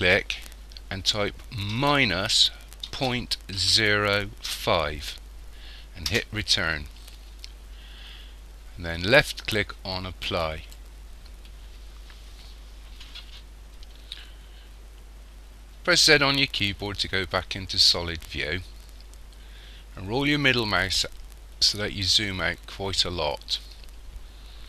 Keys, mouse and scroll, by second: 10.3 click, 16.0 z, 19.9-22.0 scroll down 5, 22.0-22.4 scroll down 1, 22.5 scroll up 1, 23.3-24.6 scroll up 1.